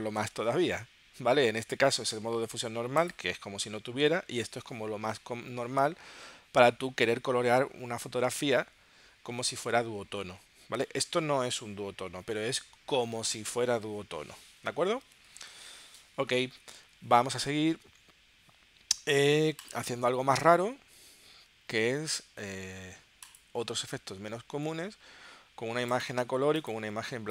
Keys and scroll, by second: 15.2 super+Tab, 17.0 super+Tab.